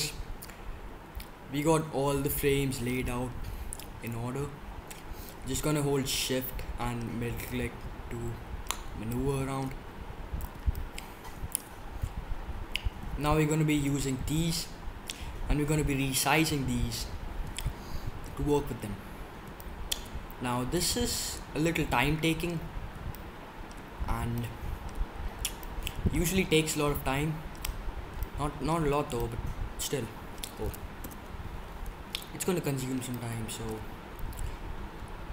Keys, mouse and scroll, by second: 4.0-6.3 middle drag, 7.4-12.1 middle drag, 29.1-31.0 middle drag, 31.0 KP_7.